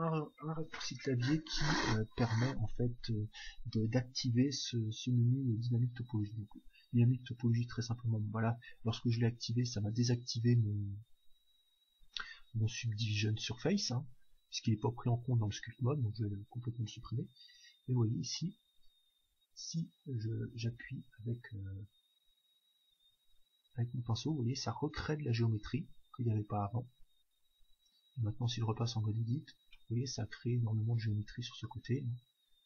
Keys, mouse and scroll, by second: 6.3-8.2 drag, 15.0-16.8 drag, 18.0-19.8 drag, 20.1-23.5 middle drag, 20.1-20.7 scroll up 2, 22.0-24.0 drag, 28.8 Tab, 29.7-31.6 middle drag, 32.4 Tab.